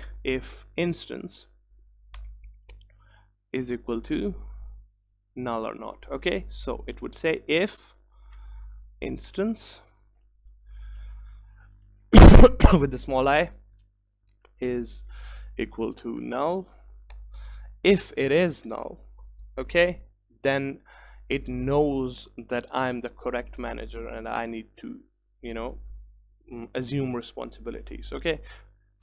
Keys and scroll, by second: 2.3 Return, 8.5 Tab, 10.2 Return, 19.3 Return.